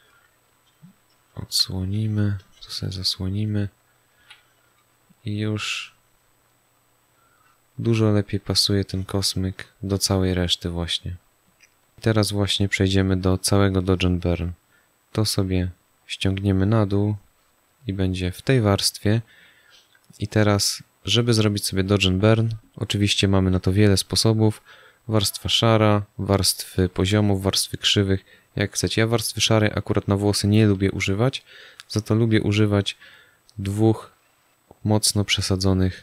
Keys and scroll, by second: 1.4 x, 4.1 z.